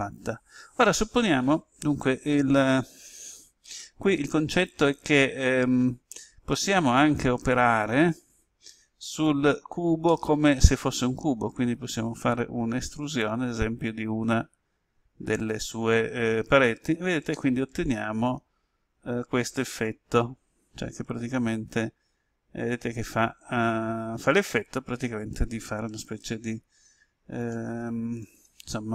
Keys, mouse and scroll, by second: 9.0 click, 10.0 middle click, 11.7 right click, 13.2 e, 16.6 ctrl+click, 17.2-19.9 middle drag, 19.9-20.6 scroll down 1, 21.6 scroll down 1, 21.7-27.3 drag, 28.1 click.